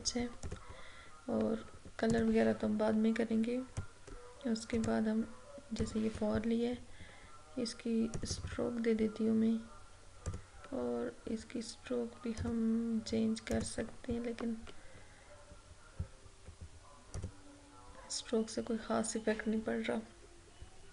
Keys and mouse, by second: 17.2 click.